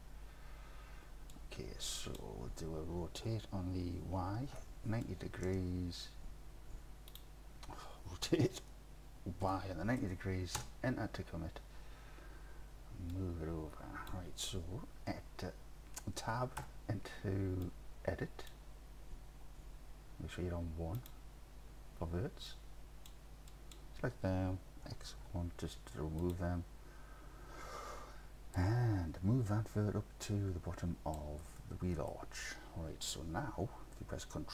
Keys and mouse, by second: 1.4 click, 3.3 r, 4.6 y, 5.1 KP_9, 5.5 KP_0, 7.1 click, 8.5 r, 9.5 y, 9.9 KP_9, 10.0 KP_0, 10.6 KP_Enter, 13.2-14.1 drag, 16.7 Tab, 17.8 click, 21.0 click, 21.7 1, 22.7 click, 24.9 x, 26.2 click, 28.7-31.2 drag, 31.7 middle click.